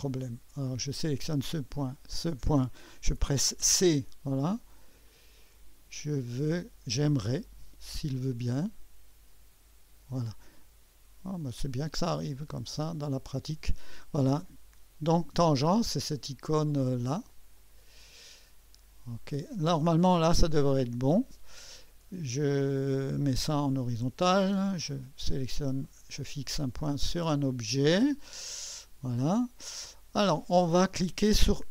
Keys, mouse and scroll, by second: 0.9 click, 2.0 click, 3.6 typing, 5.1-6.2 drag, 7.8-10.2 drag, 11.4 click, 13.3 click, 17.6 click, 19.1 click, 20.8 click, 25.8 click, 27.1 click, 28.6 click.